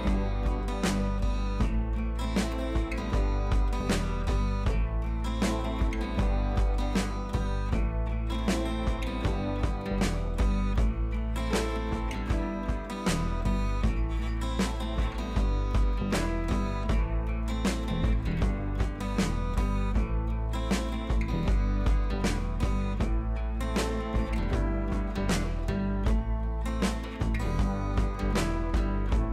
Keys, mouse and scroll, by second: 0.1 ], 0.2 click, 0.7 ], 2.4 click, 3.5 [, 4.1-5.5 drag, 7.4 ctrl+t, 7.6-8.0 drag, 11.3 ctrl+z, 12.3 ctrl+z, 12.5 click, 13.5 b, 14.5 click, 17.0 ctrl+t, 18.3 click, 18.5 ctrl+t, 18.9-19.4 drag, 25.1-26.5 drag, 27.6-28.2 scroll up 1.